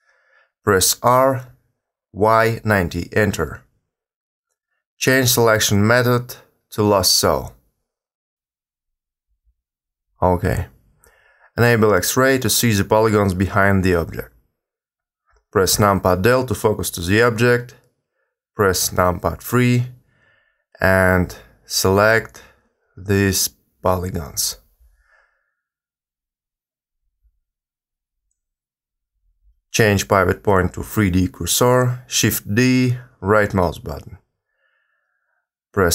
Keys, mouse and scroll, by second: 0.0 r, 6.5 w, 7.2 w, 7.8 w, 8.4 w, 9.5 w, 10.0 w, 12.5 click, 15.7 KP_Decimal, 16.4 KP_3, 18.2 a, 18.3 a, 19.4 click, 25.6 shift+middle click, 27.3-29.0 scroll down 2, 29.8 click, 32.2 shift+d, 34.7 s.